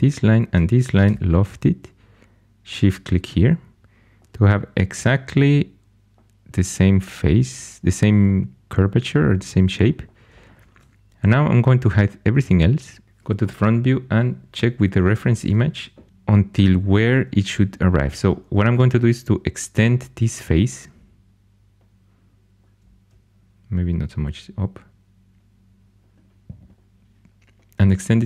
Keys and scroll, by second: 1.0 l, 11.7 shift+h, 13.0 1, 16.1 2.